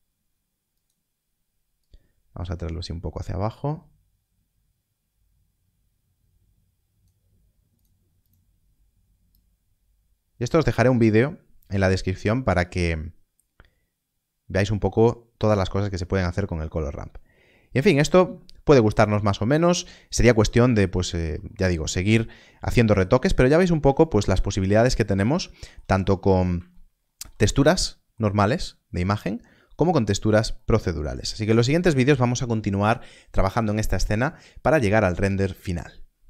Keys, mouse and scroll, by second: 16.7 middle click, 20.8-21.2 scroll down 1, 22.6 middle click, 23.2-23.7 scroll down 1, 24.0 shift+middle click, 24.9-25.3 scroll up 1, 25.5 shift+middle click, 26.7 shift+middle click, 28.3 shift+middle click, 31.2 shift+middle click.